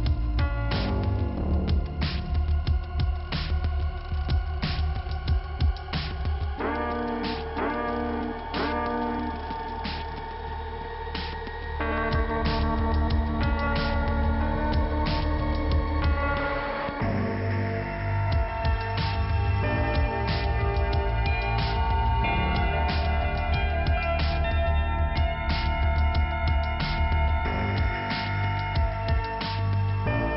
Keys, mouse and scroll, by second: 1.0 middle click, 3.0 click, 4.3 click, 5.9 click, 7.5 middle click, 8.5 scroll down 1, 9.1 click, 10.8 scroll up 1, 11.6 click, 11.7 click, 12.1 double click, 13.0 double click, 14.1 click, 14.2 click, 14.7 click, 17.0 click, 19.5 click, 20.7 click, 22.3 click, 22.6 click, 22.8 double click, 23.2 double click, 24.5 click, 25.1 click, 26.5 click, 27.9 middle click, 30.1 click, 30.2 click.